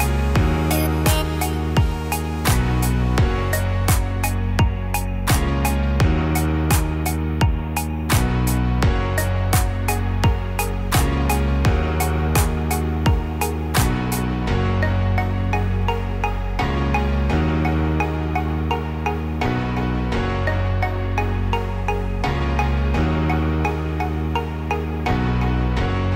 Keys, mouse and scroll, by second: 3.1 g, 5.7-6.4 scroll down 3, 7.6 Tab, 7.6-8.1 scroll down 2, 8.1 click, 8.5-9.3 scroll up 7, 9.3 middle click, 11.7 click, 12.3 middle click, 14.3 click, 17.8 click, 18.6 click, 19.8 right click, 20.9 click, 21.5 scroll up 1, 22.3 click.